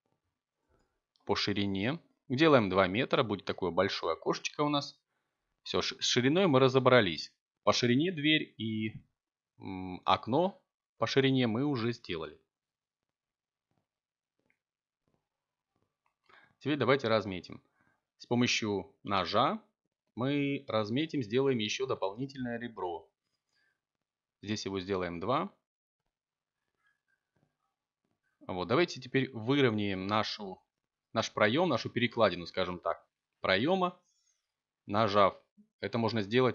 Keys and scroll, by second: 1.1 a, 11.9 k, 17.4 k, 23.7 Return, 25.7 1, 29.3 s, 30.0 z, 31.0 0, 31.9 Return.